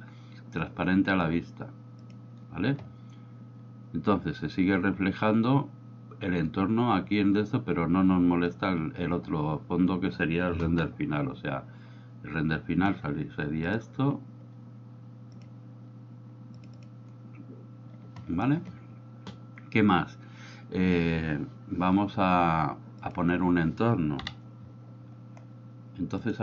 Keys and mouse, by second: 2.0 click, 11.4 F12, 16.7 click, 16.9 drag, 24.2 KP_7, 26.3 middle click.